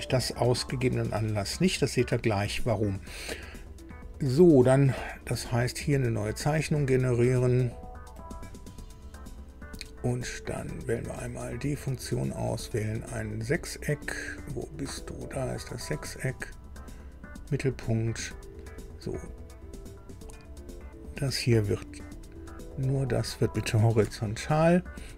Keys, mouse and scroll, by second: 8.2 click, 11.2 click, 15.5 click, 17.4 click, 18.2 click, 18.6 right click, 19.3 click, 19.9 scroll up 2, 20.8 click, 22.0 click, 22.9 click, 24.0 h.